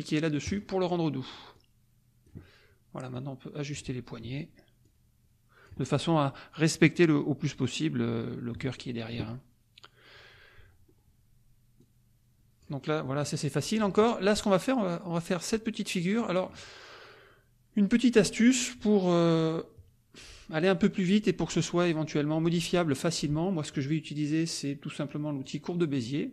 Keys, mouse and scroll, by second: 0.4 click, 1.5 click, 3.1 click, 4.8-5.8 drag, 8.7 middle click, 11.8-12.8 drag, 12.8 middle click, 13.5 middle click, 15.9 middle click, 25.4 click.